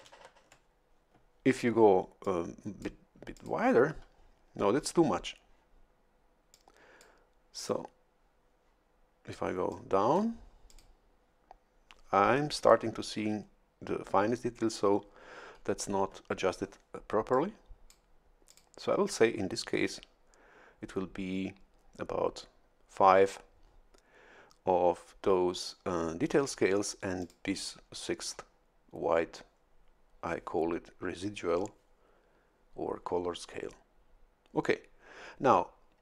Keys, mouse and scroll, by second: 0.1 shift+F11, 2.2 click, 3.3 click, 6.5 click, 7.5 click, 9.7 click, 10.6 click, 17.3 click, 18.4 click, 27.2 click.